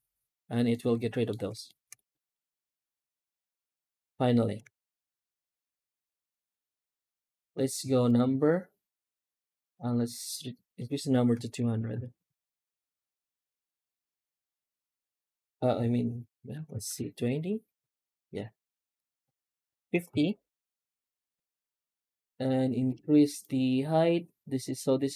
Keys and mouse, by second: 0.6-1.1 middle drag, 1.5 shift+middle drag, 2.0 middle click, 3.1 F9, 11.6 KP_0.